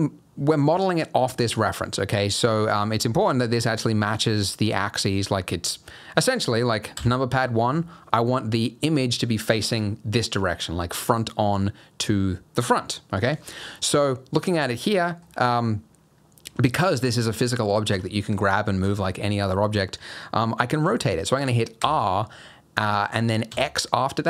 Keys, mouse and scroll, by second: 2.6-3.0 scroll up 1, 3.0-4.6 scroll down 2, 4.6-5.6 scroll up 3, 6.9 KP_1, 13.7 middle click, 14.4-14.9 scroll down 2, 14.9 middle click, 15.2-16.5 scroll down 1, 16.5 g, 21.8 r.